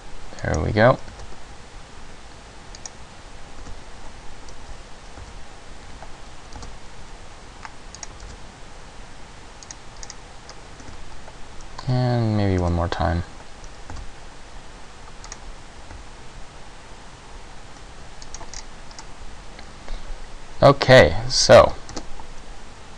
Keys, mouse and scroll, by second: 0.7 click, 1.3 alt+s, 3.0 click, 3.7 e, 5.3 s, 6.7 alt+s, 8.2 click, 8.4 alt+s, 9.9 click, 10.1 scroll down 2, 10.6-10.9 scroll up 1, 10.9 e, 12.7 s, 14.1 alt+s, 15.5 click, 16.1 s, 18.5 click, 18.7-19.1 scroll down 4, 19.1 middle click, 22.0 ctrl+g.